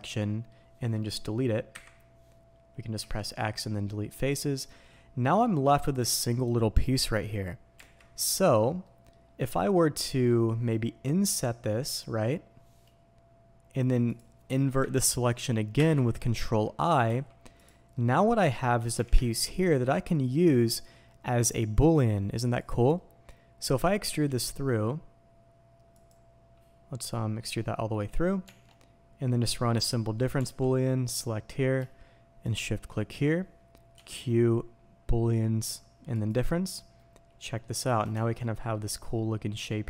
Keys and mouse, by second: 17.6-39.8 drag.